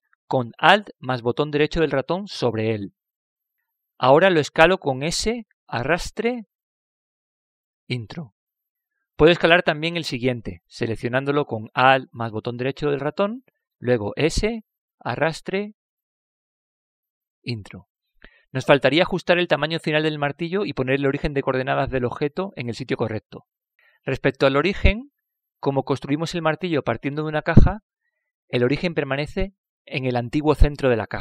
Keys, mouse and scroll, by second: 4.0-5.9 right drag, 8.1 s, 13.8-15.7 right drag, 15.5 s, 19.6-24.8 middle drag, 25.4-27.2 middle drag.